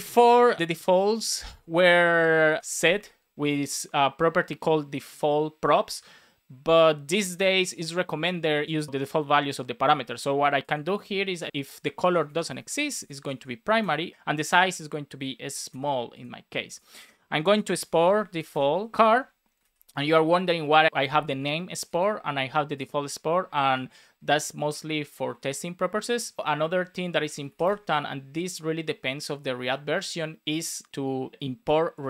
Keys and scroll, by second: 1.4 space, 11.5 space, 11.8 Left, 12.5 alt+shift+Right, 13.1 Left, 15.6 super+s, 17.4 Down, 17.6 Return, 18.5 space, 18.9 shift+c, 19.5 super+s, 23.7 super+s, 26.4 Return, 26.6 Up, 27.6 space.